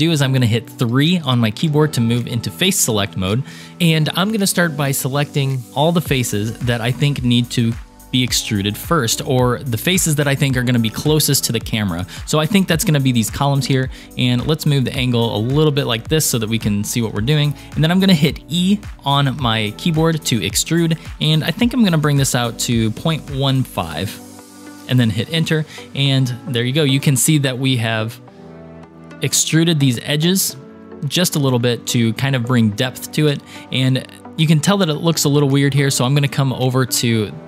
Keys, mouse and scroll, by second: 1.6 3, 2.5 click, 4.3-6.7 drag, 8.2-10.0 shift+drag, 14.0-15.8 middle drag, 16.1-17.2 shift+middle drag, 20.1 e, 25.9-27.4 middle drag, 28.1-28.7 scroll up 3, 28.7 middle click, 36.2 click, 36.8-37.4 scroll down 13.